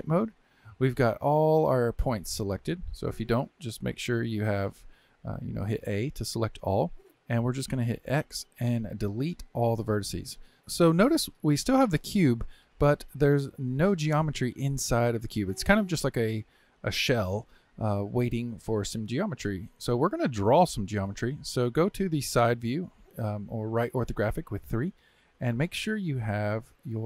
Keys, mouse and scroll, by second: 0.8-3.9 middle drag, 4.6 alt+a, 5.1 a, 6.8-7.8 middle drag, 7.8 x, 14.9-18.0 middle drag, 20.9 KP_3.